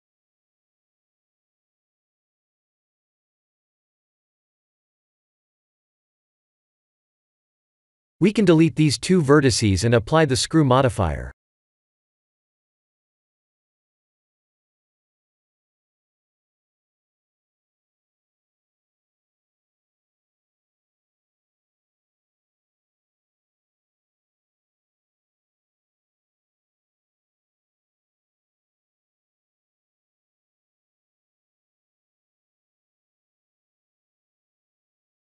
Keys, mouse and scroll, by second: 8.7 shift+middle click, 9.3 Tab, 10.8 1, 11.2 click, 11.4 b, 14.0 click, 14.6 x, 16.5 Tab, 17.7 middle click, 18.6-19.4 scroll down 10, 19.7 middle click, 20.5 KP_Decimal, 21.8 middle click, 22.7 middle click, 22.8 middle click, 23.4 KP_1, 26.1 click, 26.9 click, 30.3 click, 32.3 click, 34.0 scroll down 1, 34.5 middle click, 34.5 scroll down 3.